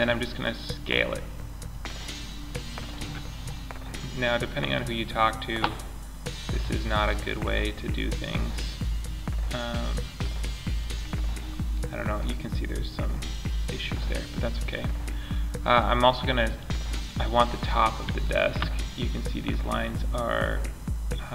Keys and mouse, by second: 2.6 middle click, 2.8 middle click, 6.1 s, 10.1-11.0 middle drag, 11.6-13.4 middle drag, 16.8 middle click, 17.0 middle click, 19.4-21.0 middle drag.